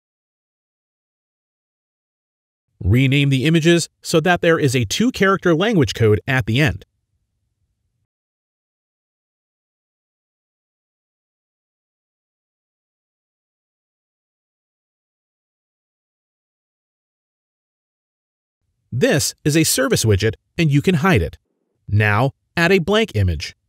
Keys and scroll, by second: 6.4-7.8 typing, 9.0 typing, 12.9-15.1 typing, 17.2-18.3 typing.